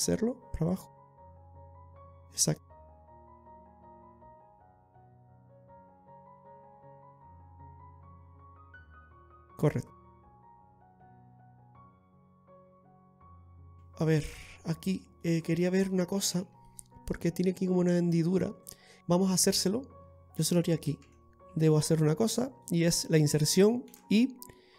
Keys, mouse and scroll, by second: 11.3 click, 13.6 KP_1, 14.2 scroll up 2, 14.7 scroll down 1, 15.2 middle click, 15.2 scroll down 3, 16.2 shift+middle click, 18.9 scroll up 1.